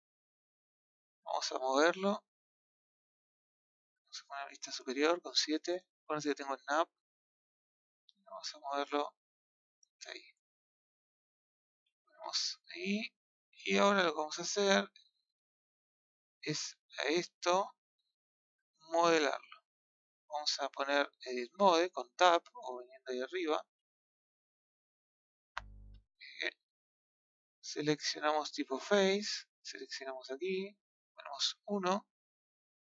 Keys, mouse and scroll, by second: 1.6 click, 2.8 click, 4.7 KP_7, 5.6-7.7 scroll up 2, 7.7 scroll up 2, 7.7 click, 9.9 scroll down 4, 10.2-11.2 middle drag, 12.0 KP_1, 15.4-16.0 scroll down 1, 16.0 scroll down 1, 16.3-18.5 middle drag, 19.4 KP_1, 24.1-24.6 scroll up 2, 24.6-25.1 scroll down 2, 25.1-25.8 scroll up 3, 28.8-30.1 middle drag, 30.1 click, 31.5 KP_1.